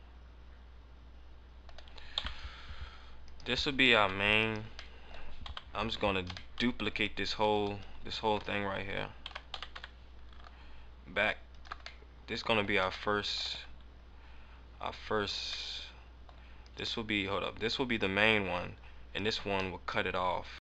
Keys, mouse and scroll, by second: 2.0 KP_7, 3.3 right click, 3.9 g, 4.4 right click, 4.9 middle click, 5.4 KP_7, 6.4 shift+middle click, 7.4 shift+middle click, 9.2 shift+d, 11.6 ctrl+click, 11.9 middle click, 12.6 scroll down 1, 13.1 shift+middle click, 13.8 scroll down 3, 14.6 scroll down 1, 15.6 scroll down 1, 15.6 middle click, 16.2-16.7 scroll down 1, 16.7 right click, 19.2 right click, 19.7 middle click, 20.4 scroll up 1.